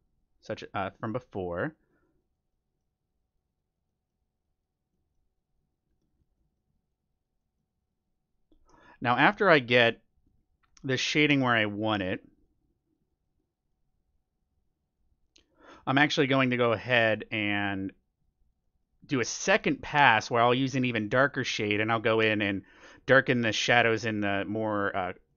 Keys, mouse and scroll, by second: 2.5-9.1 middle drag, 10.1-12.0 drag, 10.6-13.5 middle drag, 12.2-17.2 drag, 16.2-18.4 middle drag, 17.6-23.0 drag, 18.6-20.3 middle drag, 21.4-24.7 middle drag, 23.4-25.3 drag, 25.2-25.3 middle drag.